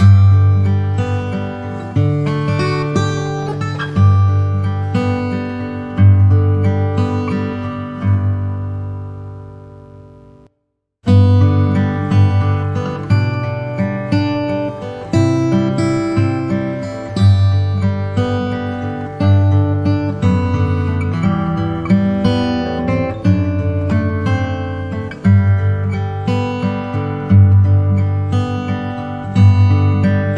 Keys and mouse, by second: 0.5 s, 4.5-6.7 middle drag, 8.1 KP_1, 9.4-14.4 middle drag, 15.2 KP_1, 20.2 KP_7, 25.6-27.1 middle drag, 27.9 KP_1.